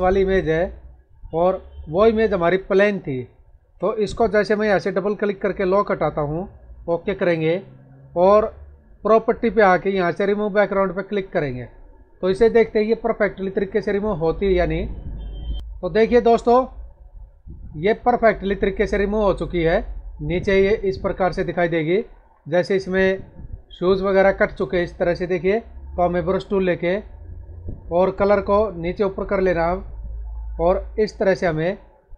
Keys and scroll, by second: 16.1 space.